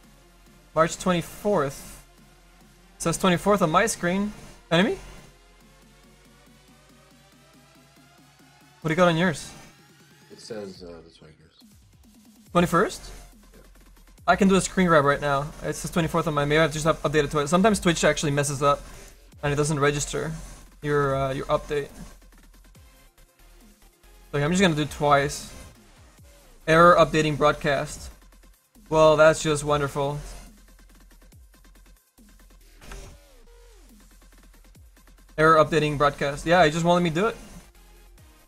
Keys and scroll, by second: 32.8 BackSpace, 32.9 ].